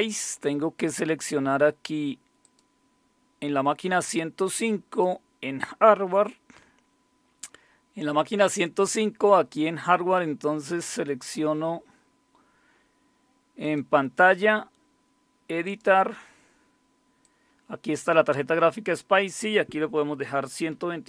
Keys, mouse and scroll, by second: 2.4 click, 4.9 click, 13.6 click, 15.6 click, 17.2-19.3 drag, 19.8-21.0 typing.